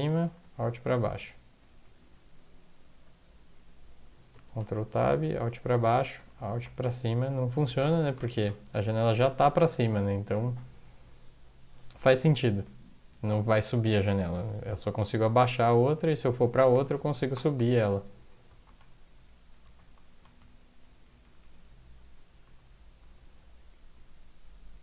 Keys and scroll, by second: 0.2 alt+Up, 0.4 alt+Up, 0.9 alt+Up, 1.1 alt+Down, 1.6 alt+Down, 2.0 alt+Down, 4.4 ctrl+Tab, 5.1 alt+Down, 5.3 alt+Down, 5.5 alt+Down, 5.6 alt+Down, 5.8 alt+Down, 6.0 alt+Down, 6.2 alt+Up, 6.3 alt+Up, 6.5 alt+Up, 6.9 alt+Down, 7.1 alt+Down, 7.9 alt+Up, 8.1 alt+Up, 9.9 alt+Down, 11.9 Down, 12.1 Down, 12.3-13.0 Down, 13.4 Up, 13.7 Up, 13.9 Up, 14.0 Up, 14.3 Up, 15.0 alt+Down, 16.4 ctrl+Tab, 16.9 Up, 17.3 Up, 18.6 alt+Up, 19.1 Down, 19.5 Down, 19.8 Up, 19.9 Up, 20.1 Up, 20.4 alt+Down, 21.0 alt+Down, 21.2 alt+Down, 21.4 alt+Down, 21.8 alt+Up, 23.2 alt+Down.